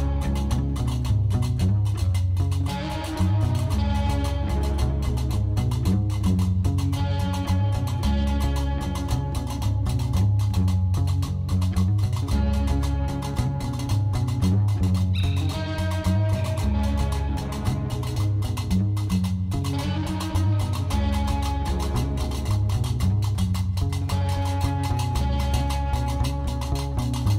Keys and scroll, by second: 0.3 shift+d, 0.7 y, 2.5 alt+a, 5.0 Tab, 5.8 l, 6.0 alt+a, 6.3 l, 7.3 Tab, 10.3 alt+a, 12.0 ctrl+z, 12.6 alt+a, 16.4 shift+s, 17.4 shift+a, 19.4 Tab, 19.8 s, 19.9 3, 20.2 Return, 21.0 Tab, 21.2 g, 24.1 Tab, 25.1 1, 25.2 0, 25.3 Return, 26.0 Tab.